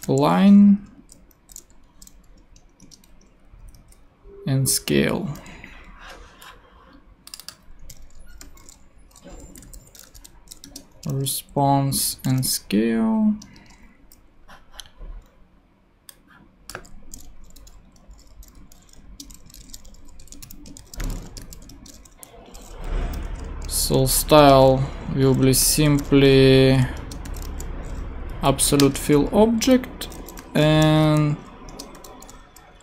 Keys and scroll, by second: 0.0-0.5 typing, 1.3 alt+shift+l, 2.2 shift+l, 2.8 Return, 3.6 Down, 8.4 shift+[, 9.4 shift+Left, 10.0 alt+shift+r, 10.0-12.7 typing, 10.6 Return, 13.4 Return, 17.2 shift+super+x, 18.6-21.6 typing, 19.0 shift+Return, 21.7 shift+Return, 22.5 Return, 23.0 Up, 23.2 alt+Right, 23.6 alt+space, 23.8 s, 24.3 Return, 25.4-27.2 typing, 27.0 Return, 28.3 Down, 28.8 Return, 29.5 Down, 30.2-31.9 typing, 31.7 Return.